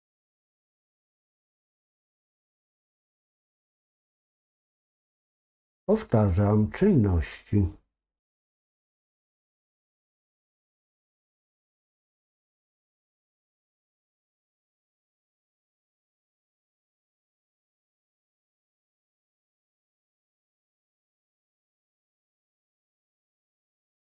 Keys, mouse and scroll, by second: 1.0 alt+shift+click, 13.7-21.5 drag.